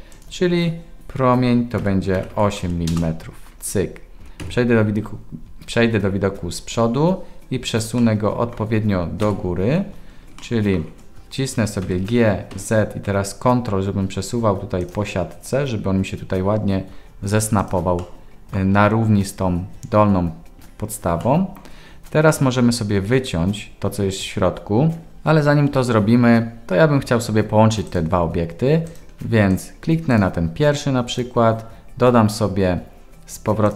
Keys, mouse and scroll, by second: 0.1-4.6 drag, 2.3 m, 4.4 KP_1, 8.1 middle click, 9.2 KP_1, 10.5 shift+middle click, 11.8 g, 18.0-18.6 middle drag, 21.2-21.5 middle drag, 30.1 click, 31.2-33.7 drag.